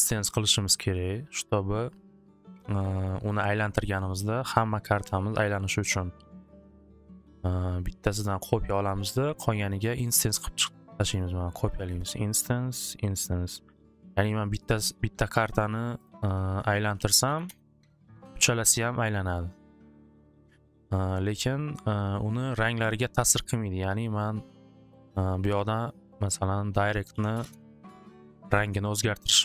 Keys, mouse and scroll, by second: 0.7 click, 7.2 click, 8.2 right click, 8.8 click, 9.2 click, 10.0 right click, 11.3 click, 12.0 click, 12.7 right click, 13.3 click, 13.9 click, 14.7 click, 16.0 click, 16.2 click, 16.9-17.3 typing, 17.5 Return, 18.9 typing, 20.1 click, 23.3-25.1 drag, 26.2 click, 26.4 click, 27.1-28.3 typing, 27.5 Return, 28.9 click.